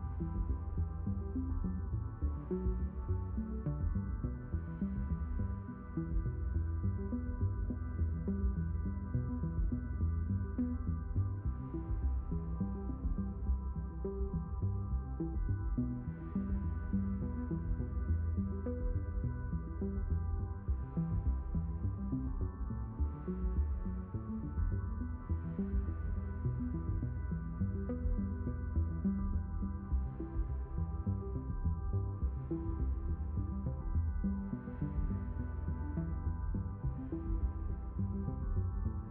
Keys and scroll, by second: 3.6 a, 9.8 ctrl+z, 10.5 q, 17.3 q, 20.4 5, 34.6 6.